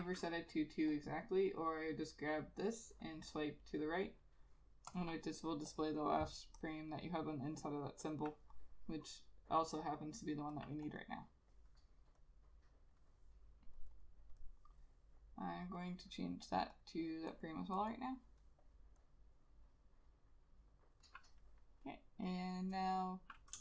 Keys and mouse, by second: 11.0 double click, 18.0 double click.